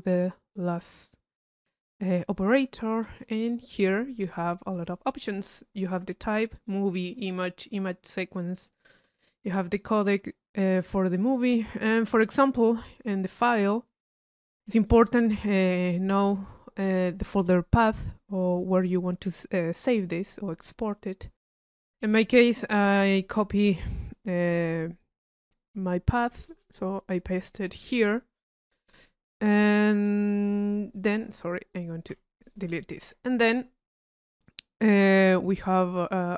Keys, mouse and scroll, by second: 1.6 click, 3.0 p, 3.4 click, 4.8 click, 6.5 click, 8.9-10.2 drag, 14.7 click, 21.6 click, 31.6 click, 32.5 click, 32.8 click.